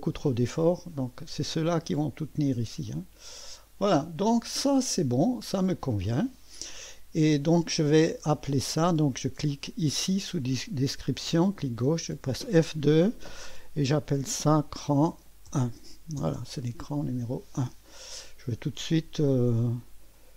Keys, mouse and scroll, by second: 2.9-4.8 drag, 5.3 click, 6.3 click, 8.4 click, 9.9 click, 12.3 F2, 13.8-16.9 typing, 20.1 click.